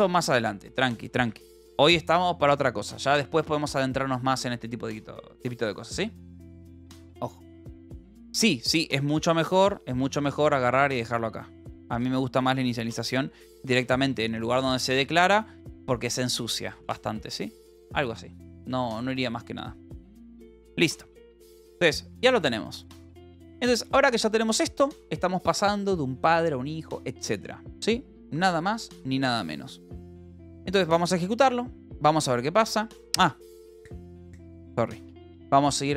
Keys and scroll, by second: 31.3 Down, 33.2 Up, 35.0-35.9 typing.